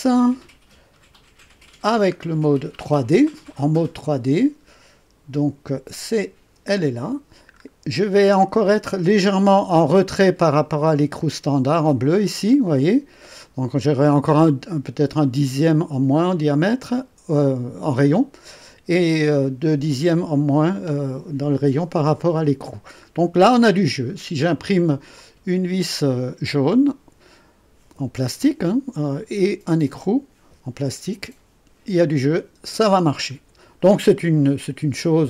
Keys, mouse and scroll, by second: 1.2 scroll down 1, 1.8 scroll down 1, 6.1 click, 6.5 space, 7.5-8.0 scroll up 4, 16.5 right click, 23.1-24.0 scroll down 4, 25.1 click, 33.4-33.7 scroll down 2, 34.1 right click.